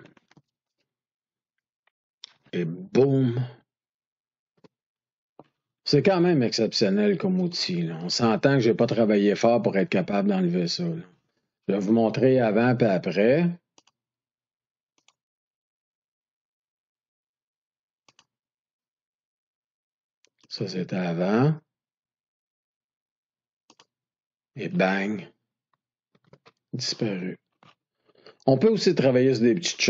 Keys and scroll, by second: 4.4 ctrl+d, 26.1 ctrl+d.